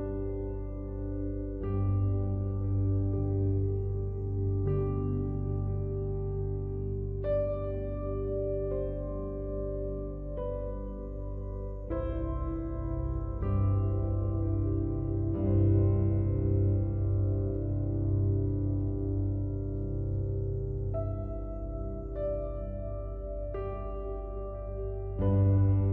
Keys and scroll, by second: 19.6 ctrl+t.